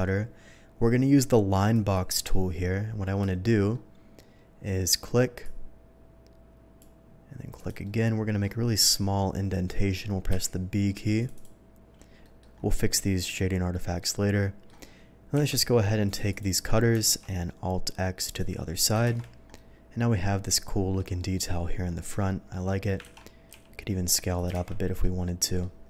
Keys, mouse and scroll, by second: 1.7 click, 5.4-6.7 drag, 7.5 click, 7.8-8.4 middle drag, 10.3 b, 11.2 click, 11.3 click, 12.2 middle click, 12.5 scroll up 1, 13.4-14.6 middle drag, 15.3 q, 16.0 click, 16.3 click, 17.0 alt+x, 18.2 click, 19.0 shift+2, 19.5-20.9 middle drag, 21.1-21.7 middle drag, 21.9-22.8 middle drag, 23.0 ctrl+z, 23.5 s, 24.3 click, 24.5 shift+2, 25.0-25.6 middle drag.